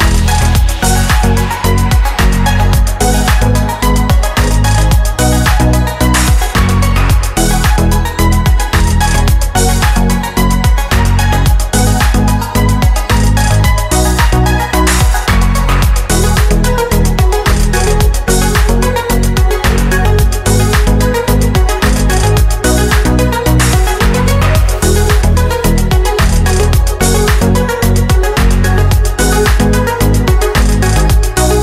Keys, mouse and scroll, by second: 0.4 click, 1.2 click, 2.8 click, 4.5 click, 4.8 click, 5.9 ctrl+c, 6.5 click, 7.1 click, 7.9 ctrl+v, 8.5 ctrl+F1, 8.9 click, 11.0 click, 12.0 click, 13.4-14.8 drag, 15.7 shift+click, 16.9 click, 17.7 click, 19.8 click, 22.1 click, 23.3 KP_4, 23.4 KP_5, 23.8 Tab, 25.4 click, 26.1 click, 26.9 KP_4, 27.0 KP_5, 27.3 Return, 28.4 click, 28.8 click, 31.2 click.